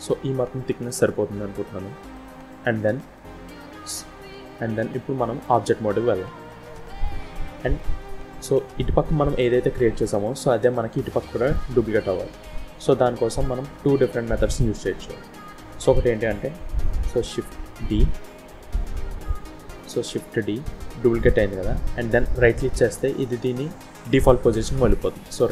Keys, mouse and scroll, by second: 2.6-2.9 scroll down 2, 2.9 middle click, 4.8 middle click, 4.8 scroll up 1, 6.3 Tab, 7.0 middle click, 7.9 middle click, 9.9 middle click, 11.3 scroll down 1, 11.4 middle click, 12.8-13.3 scroll up 2, 13.3-13.7 scroll down 2, 13.7 middle click, 17.7 d, 19.9 d.